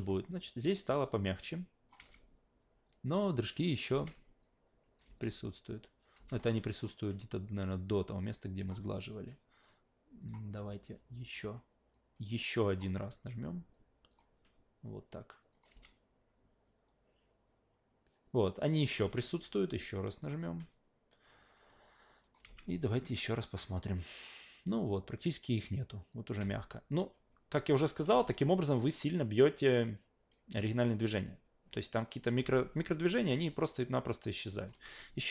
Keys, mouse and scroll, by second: 1.4-1.9 drag, 3.9 alt+v, 4.4-5.0 drag, 5.0 alt+v, 6.1 alt+v, 6.4-6.8 alt+middle drag, 7.5-8.7 drag, 9.6 alt+right click, 10.9-12.8 drag, 14.1 click, 15.5 click, 15.7 alt+v, 18.9 alt+v, 20.2 click, 22.2 click, 22.4 alt+v, 26.4 alt+v, 27.8 click, 28.1 alt+v, 32.4 alt+v, 32.7 click, 34.4-34.7 drag, 34.7 f.